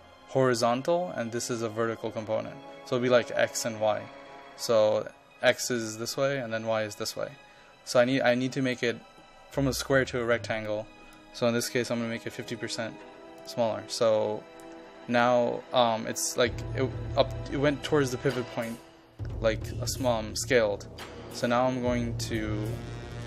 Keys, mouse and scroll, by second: 11.9 KP_0, 12.3 KP_Decimal, 12.5 KP_5, 13.5 click.